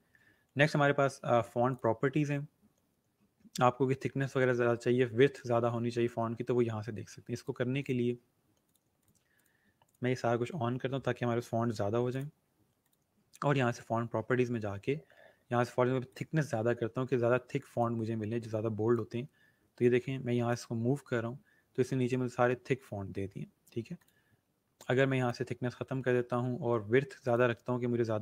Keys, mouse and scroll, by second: 1.7 click, 7.3 click, 12.1 click, 16.0 click, 21.5 scroll down 1, 22.9 scroll up 1, 23.9 click, 27.2 click.